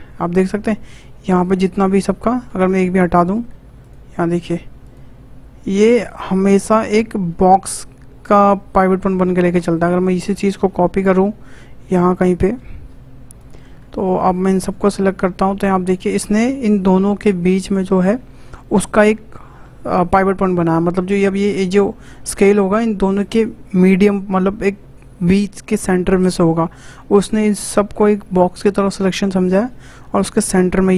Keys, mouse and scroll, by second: 2.6 ctrl+click, 3.8 shift+click, 4.4 shift+click, 4.8 shift+click, 5.6 shift+click, 6.0 shift+click, 6.5 shift+click, 6.9 shift+click, 8.5 s, 10.2-10.8 scroll down 4, 11.0 shift+d, 13.6 scroll down 1, 13.9 shift+middle click, 14.5 click, 15.3-15.8 scroll up 5, 16.0-19.1 shift+middle drag, 21.2 s, 30.3 s.